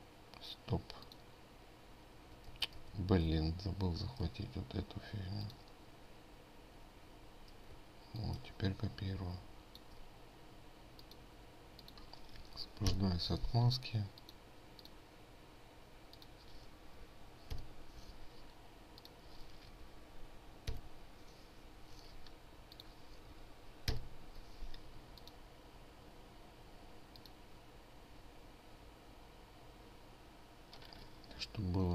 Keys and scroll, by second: 3.3 ctrl+z, 3.3 ctrl+z, 3.9 ctrl+z, 13.5 ctrl+alt+7, 18.1 ctrl+alt+7, 21.3 ctrl+alt+7, 24.5 ctrl+alt+7.